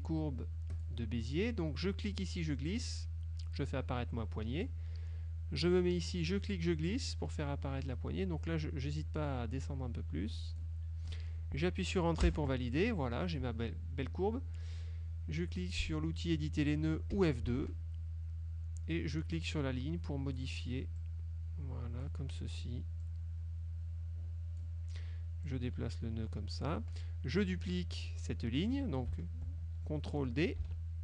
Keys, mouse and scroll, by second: 0.8 click, 2.2-5.0 drag, 6.4-10.9 drag, 12.4 Return, 12.8 click, 13.0 middle click, 17.2 F2, 19.4-20.7 drag, 21.1-22.3 drag, 23.1-24.9 drag, 25.6-27.0 drag, 30.7 ctrl+d.